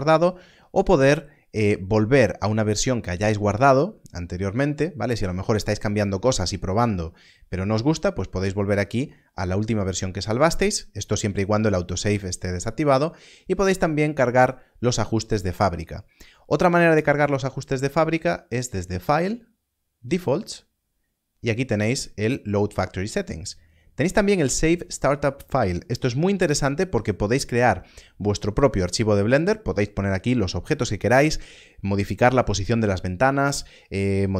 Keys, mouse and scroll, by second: 16.7 click.